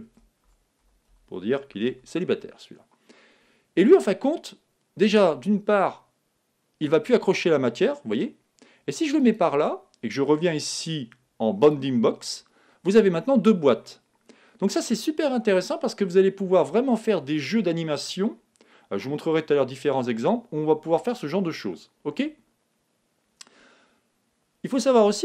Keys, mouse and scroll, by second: 0.0 l, 5.1 g, 11.6-13.5 drag.